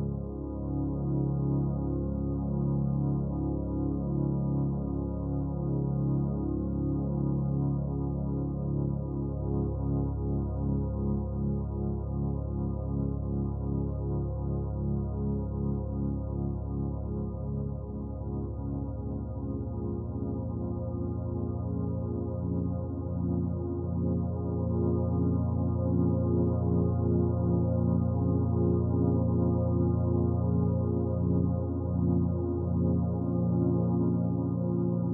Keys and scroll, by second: 13.0 ], 15.9 typing, 23.0 typing.